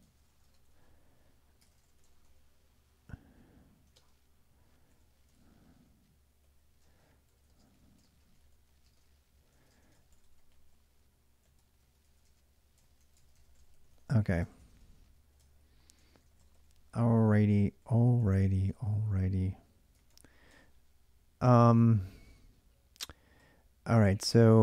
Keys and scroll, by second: 0.0-2.0 typing, 1.5 ctrl+[, 1.8 Return, 3.4-4.2 typing, 5.1 ctrl+[, 5.2-11.4 typing, 11.4 ctrl+[, 11.9 ctrl+[, 12.5-19.9 typing, 15.2 ctrl+[, 15.5 ctrl+j, 19.8 ctrl+[, 20.3 Return, 21.4 ctrl+[, 21.4 ctrl+j, 23.2-23.8 k, 23.8-24.4 j.